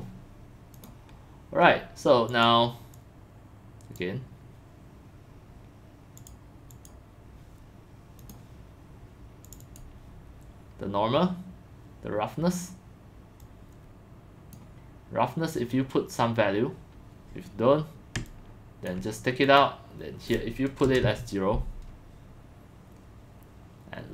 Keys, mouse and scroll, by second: 2.3 click, 4.2 click, 6.2 click, 6.4-7.4 drag, 8.2 click, 9.5 click, 9.6 click, 13.4-14.4 drag, 18.3-18.9 ctrl+drag, 19.9 click, 20.8 KP_0, 21.0 Return.